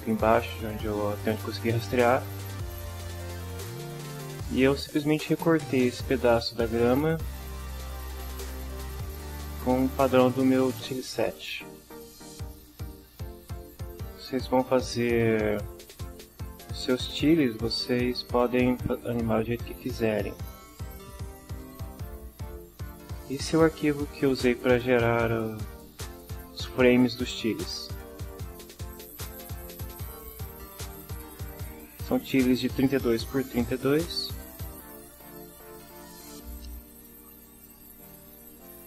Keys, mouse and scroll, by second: 11.5 click, 13.0-14.3 drag, 15.1 click, 15.4 right click, 18.2 click, 31.8 middle click, 34.2 shift+=, 35.9 shift+=.